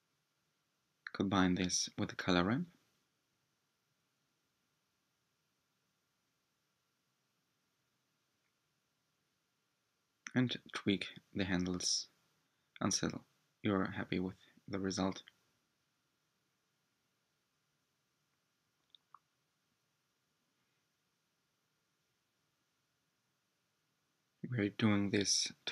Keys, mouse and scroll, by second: 4.5 ctrl+shift+click, 6.5-9.5 drag, 11.8 click, 15.7 ctrl+shift+click, 19.1-24.7 drag, 25.6 click.